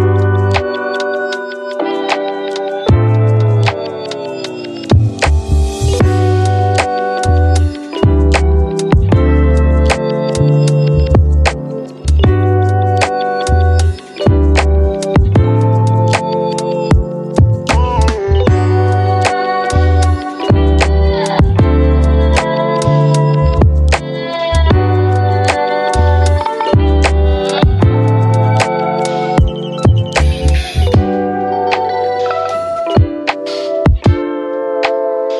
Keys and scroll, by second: 0.5 ctrl+d, 2.7-3.6 typing, 5.0 space, 5.6 f, 7.8 Delete, 9.6 Delete, 9.7 v, 10.8 ctrl+d, 11.0-11.8 typing, 15.6 d, 19.7 v, 27.6 space, 28.2 space, 28.7 f, 31.4 Delete, 31.8 space, 34.1 1.